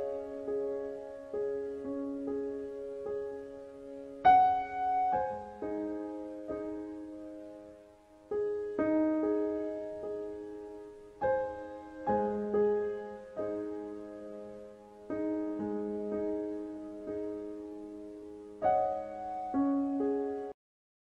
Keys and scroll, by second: 20.0-21.0 typing.